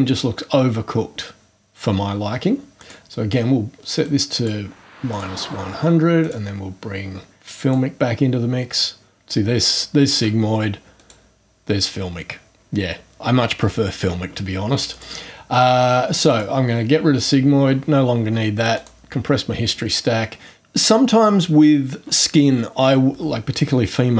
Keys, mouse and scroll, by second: 2.8 click, 4.0-4.6 drag, 5.1 click, 6.2 click, 7.4 click, 10.9 click, 14.9 click, 16.3 click, 18.7 click.